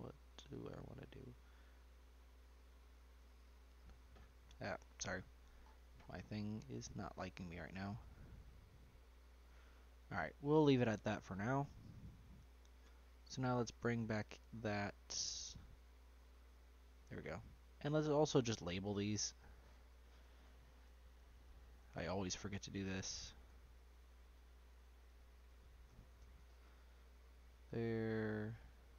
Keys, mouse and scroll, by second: 1.3-4.3 drag, 4.7-5.6 drag, 5.6-7.5 scroll up 11, 7.5 click, 9.8 scroll down 2, 10.0-10.5 middle drag, 10.5-11.5 scroll up 4, 11.0 middle click, 11.5 shift+middle drag, 11.8-12.4 scroll down 4, 12.4 middle click, 12.7-13.6 scroll up 1, 13.6-14.7 scroll down 4, 14.7-16.1 scroll down 5, 16.1 click, 17.5-18.3 scroll up 1, 18.3 click, 19.2 click, 19.3-22.5 drag, 25.2 n, 28.9 click.